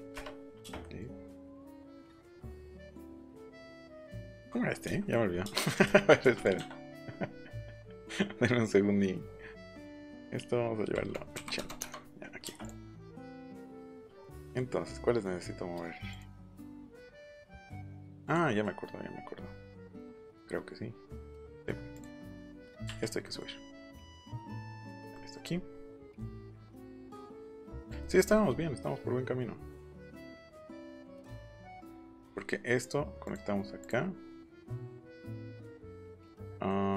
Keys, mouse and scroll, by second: 0.1 Return, 0.4 middle click, 1.1 middle click, 1.7 l, 1.9 middle click, 3.0 click, 4.4 middle click, 4.8 shift+middle click, 5.3 middle click, 5.4 space, 5.7 click, 5.8 shift+middle click, 6.3 click, 11.3 KP_8, 11.5 KP_0, 11.7 Return, 12.6 click, 13.3-15.1 scroll up 1, 16.1 click, 16.2 click, 17.0 click, 17.6 click, 18.2 click, 18.4 middle click, 21.9 click, 22.0 middle click, 22.2 scroll up 1, 22.5 middle click, 22.5 scroll down 1, 22.8 Up, 24.8 click, 26.4 click, 26.7 Escape, 26.9 click, 27.8 click, 28.2 scroll down 1, 32.1 Escape, 33.2 click, 33.8 click, 36.6 middle click.